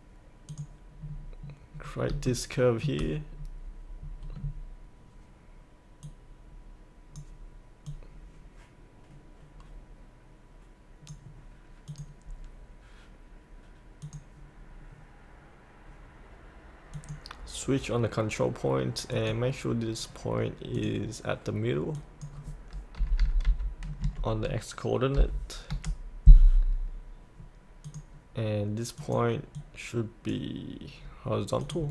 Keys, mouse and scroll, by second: 1.0-2.1 scroll down 1, 2.2 shift+middle click, 3.3-6.0 scroll up 1, 6.0-7.4 drag, 8.6-11.5 drag, 23.0 KP_8, 24.0 KP_Decimal, 25.2 KP_5, 27.8-30.8 drag.